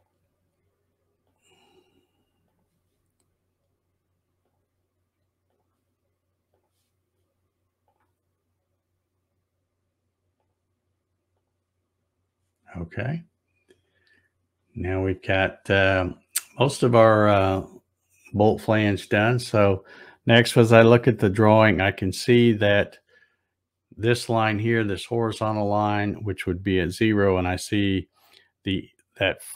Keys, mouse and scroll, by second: 1.2 click, 2.4 click, 4.4 click, 5.5 click, 6.5 click, 7.9 click, 10.4 click, 11.4 click, 13.1-13.4 scroll down 1, 13.5-14.0 scroll up 1, 14.4 scroll up 1.